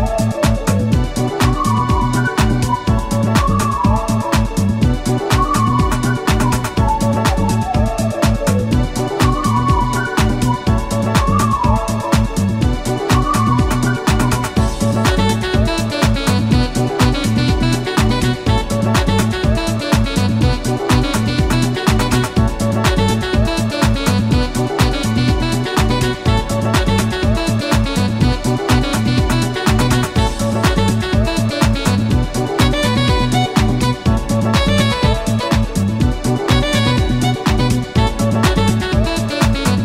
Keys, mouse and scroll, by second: 0.2 shift+a, 1.6-3.4 shift+drag, 4.3 click, 4.8 scroll up 1, 5.6 scroll down 1, 6.0 middle click, 7.0-7.8 middle drag, 8.0 scroll down 2, 8.3 shift+middle click, 9.6-10.5 shift+drag, 10.6 shift+a, 11.0 b, 11.1-11.7 shift+drag, 12.1 g, 12.8 shift+click, 13.4-14.0 shift+scroll up 3, 14.8 a, 18.7 click, 19.8 click, 20.9-22.1 drag, 23.0-23.9 shift+middle drag, 24.1 shift+scroll up 2, 25.1 shift+a, 27.5 click, 28.2 click, 28.7 scroll up 2, 29.2 scroll up 2, 29.8 click, 30.6 click, 31.8 click, 32.8 click, 33.4-34.1 middle drag, 34.1 scroll down 1, 34.6-35.3 middle drag, 35.8 click, 37.5 click, 39.0 f, 39.4 0.